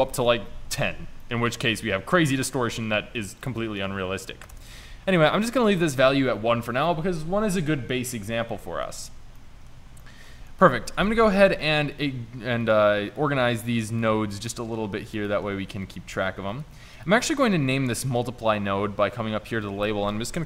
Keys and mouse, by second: 1.3 middle click, 1.6 middle click, 1.9-2.3 middle drag, 8.6-9.4 middle drag, 10.8 shift+Tab, 11.3 shift+Tab, 11.7 g, 13.3 g, 14.5 g, 16.0 g, 18.1 n.